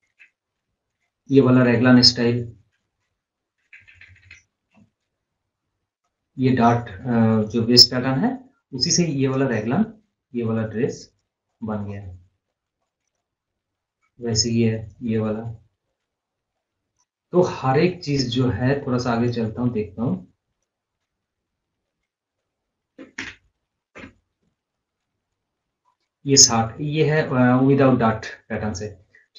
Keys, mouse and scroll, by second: 1.0 Up, 2.9 Down, 6.1-9.6 drag, 9.6 scroll up 1, 9.9 scroll down 1, 10.1 scroll up 1, 10.8 click, 11.6 scroll down 1, 13.6-14.1 scroll up 1, 14.6 click, 15.3 scroll down 1, 17.0 scroll down 1, 18.9-24.8 drag, 25.0 scroll down 1, 25.3 scroll up 1, 25.6 scroll down 1, 25.9-26.3 scroll up 1, 27.4-29.3 drag.